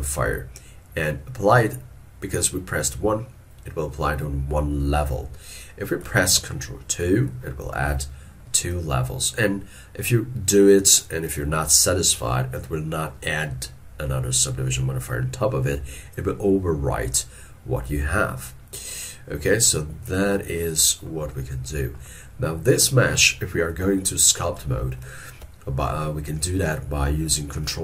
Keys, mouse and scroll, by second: 6.1 middle click, 7.7 ctrl+2, 19.1 middle click.